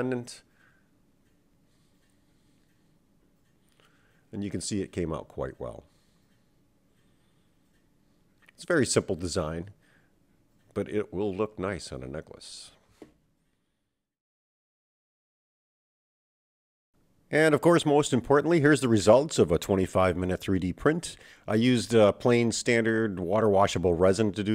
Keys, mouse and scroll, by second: 16.1-17.9 right drag, 17.5 middle click, 18.1 middle click, 22.0-22.8 scroll up 1.